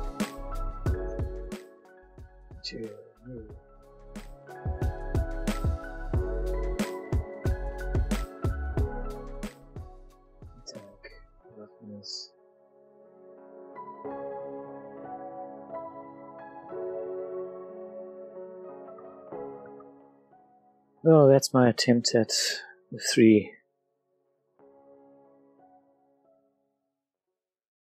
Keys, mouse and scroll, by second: 1.1 Tab, 1.3 middle click, 2.5 click, 4.4 click, 5.5 click, 7.4 middle click, 9.1 middle click, 11.3 middle click, 12.0 click, 13.3-16.0 drag, 16.9-18.8 drag, 18.9 shift+middle click, 19.4 middle click, 19.5 middle click, 19.8 shift+middle click, 20.3 click, 21.0 middle click, 23.9-24.7 scroll, 25.0 middle click, 26.3-27.1 scroll, 27.3 shift+middle click.